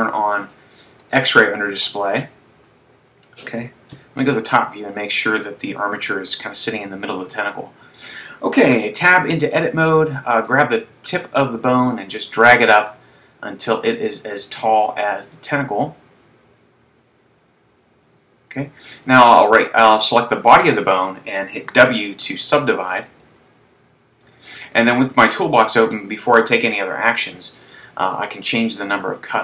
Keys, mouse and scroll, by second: 1.2 click, 4.1 KP_7, 6.5 KP_3, 9.0 Tab, 10.7 right click, 11.8 click, 19.8 right click, 22.6 w, 28.3 click, 29.0 click.